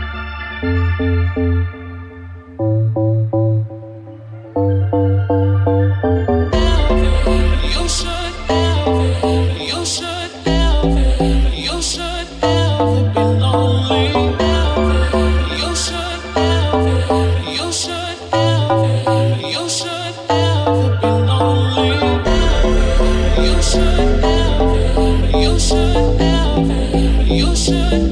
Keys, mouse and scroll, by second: 0.7 a, 1.5 e, 5.4 ctrl+r, 5.9-14.9 ctrl+middle drag, 6.3 ctrl+b, 10.7 alt+right click, 14.9 alt+right click, 15.0-19.6 alt+middle drag, 19.0 alt+right click, 19.6 alt+right click, 19.7-28.1 alt+middle drag.